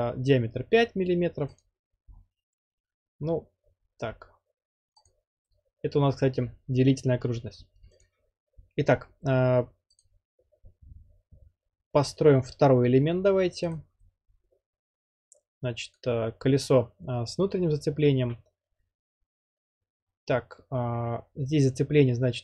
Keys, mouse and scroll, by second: 1.6 click, 2.2-2.6 scroll, 5.1-6.2 drag, 8.0-9.1 drag, 10.1-11.0 drag, 13.7-14.8 drag, 16.0-17.0 drag.